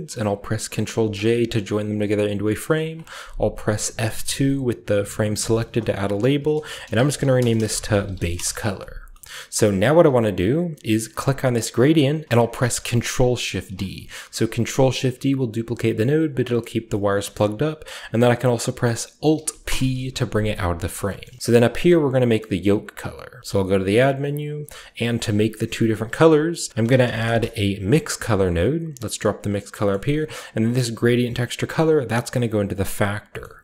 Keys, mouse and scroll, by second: 0.8 ctrl+j, 5.0 F2, 6.6-9.2 typing, 8.9-11.2 shift+scroll down 1, 9.3-11.2 shift+middle drag, 11.2 click, 12.7-13.4 typing, 16.3-17.3 drag, 19.6 alt+p, 20.6 g, 20.8-22.2 drag, 21.3 a, 22.4-23.9 middle drag, 23.3 shift+a, 24.4-26.5 shift+drag, 26.7-27.2 typing, 28.5 click, 29.4 click, 30.1-33.4 drag, 30.1 middle click, 33.4-33.6 scroll up 1.